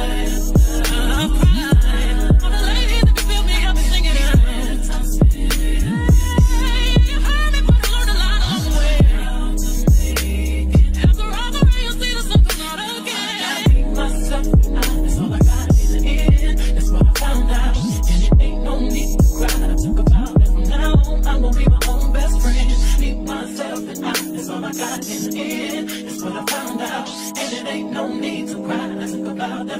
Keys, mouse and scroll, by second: 10.6 KP_1, 21.1 KP_1, 21.9 Tab, 27.2 Tab, 27.7 Tab.